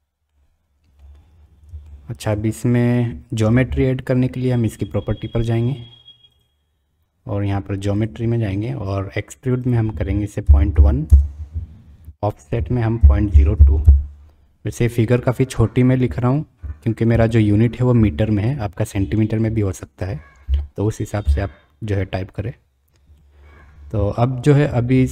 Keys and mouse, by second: 0.3-0.9 drag, 1.8-2.2 shift+drag, 6.3 click, 8.0 click, 9.8-11.4 drag, 12.3-14.7 drag, 23.2 middle click, 24.1-24.5 shift+middle drag.